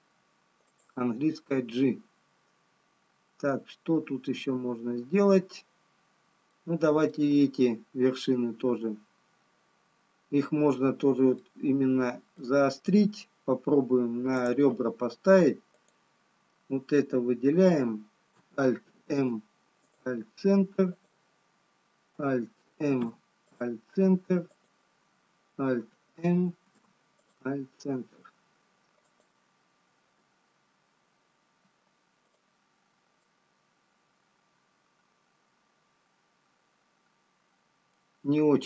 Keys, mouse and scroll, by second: 0.4 middle click, 2.6 middle click, 10.6-11.1 scroll up 3, 12.3 middle click, 12.3 scroll up 5, 15.5 click, 19.9 alt+m, 21.4 click, 23.2 alt+m, 24.9 click, 28.6 alt+m, 28.6 scroll down 1, 30.7 click, 32.9 alt+m, 35.1 middle click, 38.1-38.6 ctrl+z.